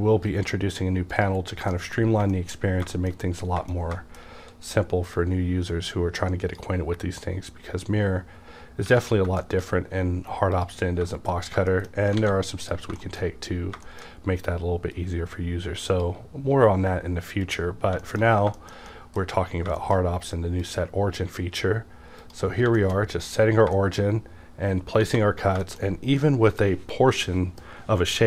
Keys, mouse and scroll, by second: 1.5 scroll down 1, 1.7 shift+middle click, 2.0 scroll down 1, 2.3 shift+middle click, 2.6-3.6 scroll up 3, 2.9 shift+middle click, 3.7 shift+middle click, 5.2-9.4 drag, 8.9 Tab, 9.4 shift+middle click, 10.5 click, 10.7 shift+middle click, 11.1 middle click, 11.1-11.5 scroll down 1, 11.7 shift+middle click, 12.2 alt+a, 12.6 click, 13.0 shift+middle click, 13.6-14.9 scroll up 2, 13.8 middle click, 14.9-17.8 drag, 17.8-18.5 scroll down 3, 18.0 shift+middle click, 18.6-19.5 shift+middle drag, 19.5-19.8 scroll up 2, 20.9-22.2 drag, 22.5-23.6 scroll down 3, 22.8 middle drag, 23.0-23.6 scroll up 1, 23.6 scroll up 2, 23.7 shift+middle drag, 25.1 alt+a, 25.6 shift+middle click, 25.8-26.2 scroll down 1, 26.2-28.2 middle drag.